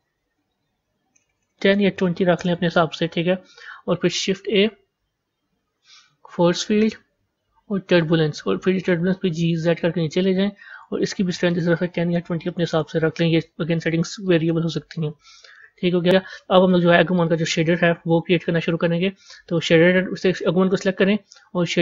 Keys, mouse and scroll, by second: 1.2 BackSpace, 1.3 BackSpace, 4.1 shift+a, 9.2 g, 11.4-14.1 drag, 14.1-15.5 middle drag, 15.5 a, 16.2-17.0 middle drag, 17.0 click, 19.4 click.